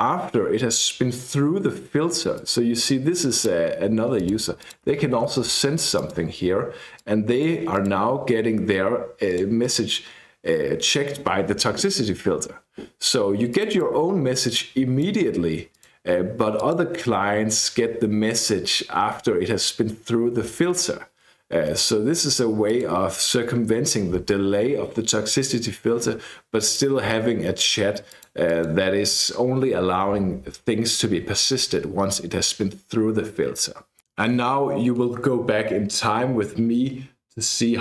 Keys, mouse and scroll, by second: 2.4-3.7 drag, 4.2 click, 4.5-6.2 typing, 6.0 click, 7.0 click, 9.3 click, 13.5 click, 14.6 click, 15.7 click, 16.6 click, 22.7 click, 26.6 click, 28.1 click.